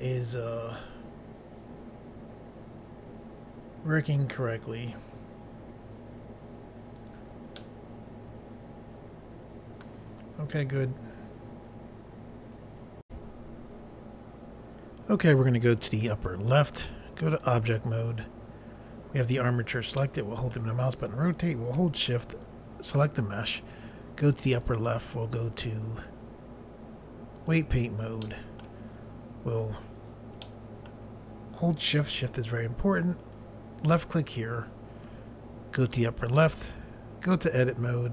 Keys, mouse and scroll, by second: 6.9 right click, 7.6 middle click, 10.5 scroll down 1, 13.0 Pause, 16.6 click, 17.4 click, 17.5 click, 19.9 middle click, 22.4 shift+click, 24.5 click, 27.3 click, 28.2 middle click, 30.4 middle click, 33.2 shift+click, 36.3 click, 37.2 click.